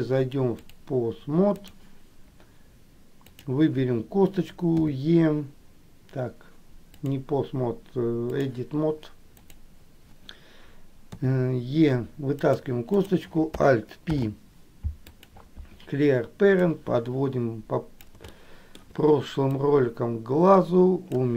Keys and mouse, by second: 0.6-2.1 drag, 7.3-8.7 drag, 9.6 click, 13.0 click, 14.3 alt+p, 16.8-18.2 drag, 18.6 shift+middle click, 19.8-21.3 drag.